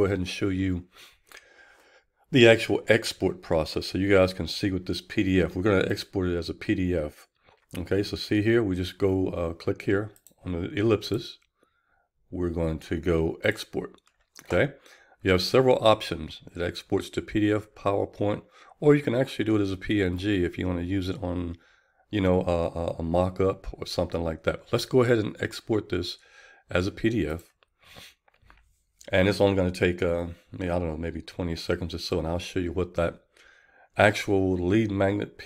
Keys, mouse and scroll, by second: 13.8-35.4 drag.